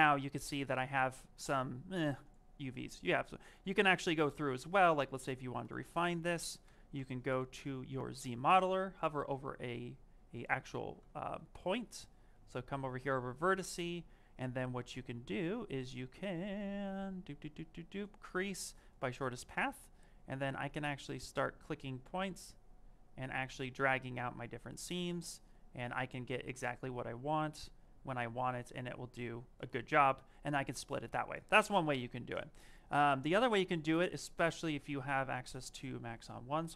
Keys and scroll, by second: 6.8 z, 7.1 m, 11.3 s, 13.4 space.